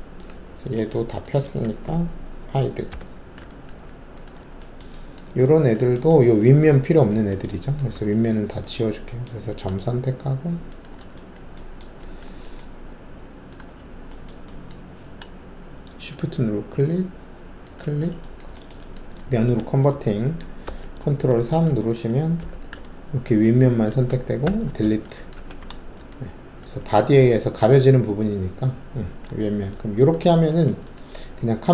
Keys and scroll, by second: 2.9 h, 7.9 alt+1, 20.6 ctrl+alt+3, 22.3 alt+4, 24.4 ctrl+alt+`, 25.3 ctrl+`.